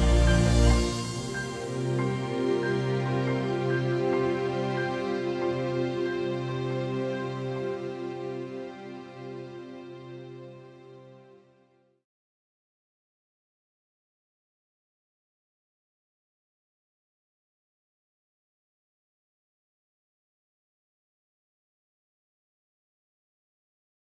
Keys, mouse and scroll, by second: 0.1 middle click, 0.8 middle click, 13.1 KP_1, 13.2 KP_0, 13.5 Return, 14.3 KP_5, 14.4 Return, 18.6 KP_0, 18.7 Return.